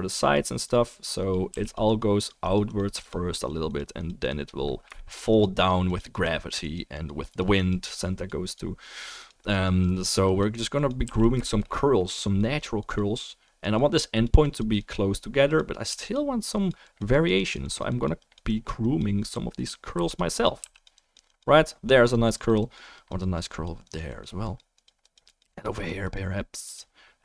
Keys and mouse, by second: 1.5 f, 1.7 click, 4.9 shift+drag, 4.9 shift+right drag, 11.0 f, 11.2-12.3 shift+drag, 16.0 f, 16.1-16.5 drag, 20.0 f, 20.1 drag, 20.6 f, 20.8 click.